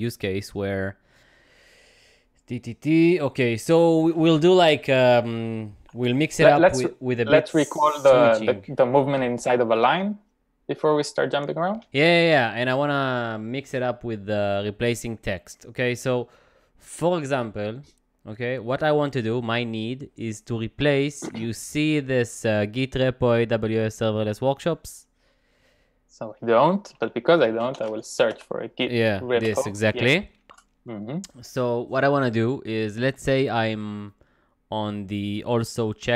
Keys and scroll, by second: 6.0 typing, 7.2 j, 27.3-30.4 typing, 30.6 Return.